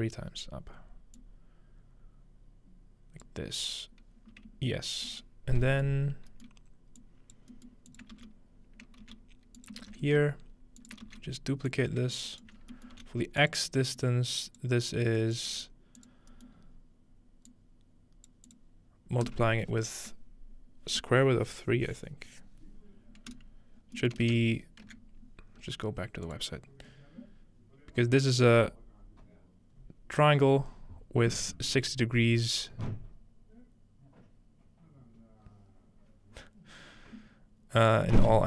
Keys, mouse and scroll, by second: 1.2-3.3 drag, 5.1-6.2 shift+middle drag, 5.4 scroll down 1, 6.1-6.5 scroll up 2, 7.0 click, 7.9 click, 8.1-9.0 typing, 9.6 shift+click, 9.8 ctrl+space, 10.4-11.3 scroll up 1, 10.8 click, 11.1 shift+d, 11.3-13.5 drag, 12.3-13.5 right drag, 12.9 middle click, 13.0 shift+g, 14.1-15.5 drag, 15.2 right click, 15.5 g, 16.0 click, 16.3-17.5 scroll up 1, 17.5 click, 18.5 click, 19.3 click, 23.3 right click, 23.8 scroll down 2, 24.0-25.7 ctrl+middle drag, 26.3-27.9 drag.